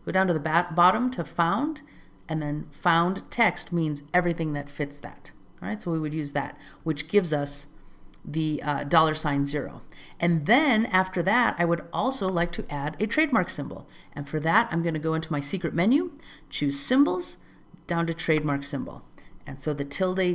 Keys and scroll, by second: 9.2 alt+z, 19.6 alt+z.